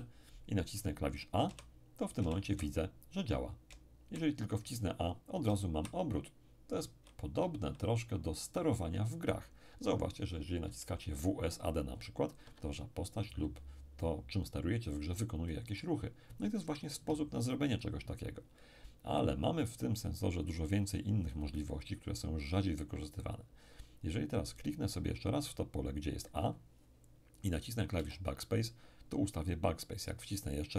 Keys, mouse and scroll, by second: 1.5 a, 2.2 a, 2.5 a, 3.7 a, 5.4 a, 9.7 a, 10.2 a, 12.4 Escape, 14.0 click, 26.4 click, 28.0 BackSpace, 29.7 click.